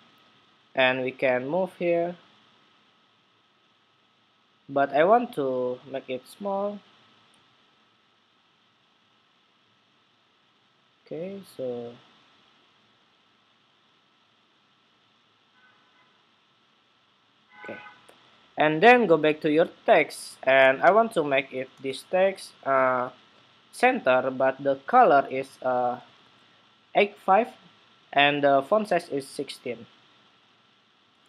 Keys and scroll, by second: 25.6 super+c.